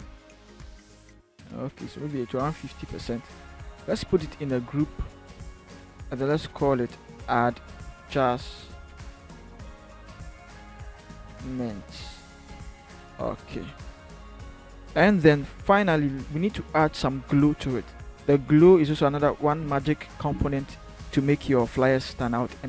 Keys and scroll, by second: 4.3 ctrl+g, 6.9-7.8 typing, 9.8-12.4 typing, 19.4 b, 22.3 b.